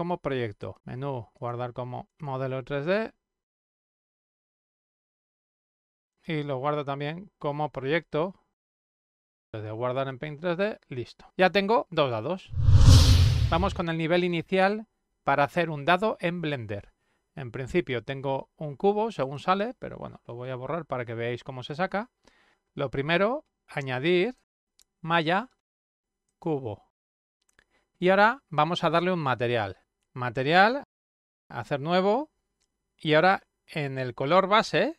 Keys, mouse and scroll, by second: 0.6 click, 1.5 click, 2.8 click, 4.6 shift+-, 5.1 click, 5.3 click, 6.4 click, 9.3 click, 9.7 click, 11.4 click, 19.2 click, 23.9 click, 26.7 click, 30.6 click, 32.0 click.